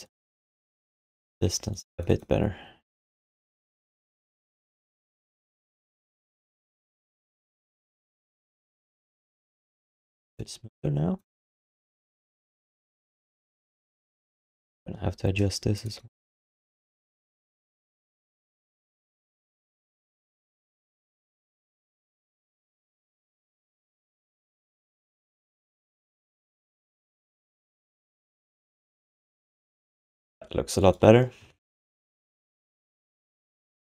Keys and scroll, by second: 11.5 1, 14.8 w, 15.3 d, 19.3 q, 25.2 q, 27.1 alt+shift+d, 27.6 ctrl+s, 27.9 3, 31.4-33.0 typing, 33.5 ctrl+shift+d.